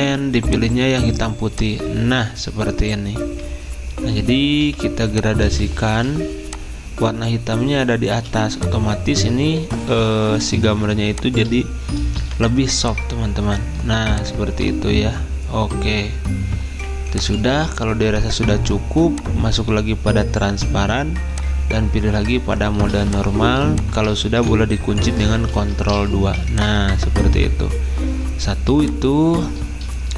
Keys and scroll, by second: 25.3-26.2 typing, 28.7 space.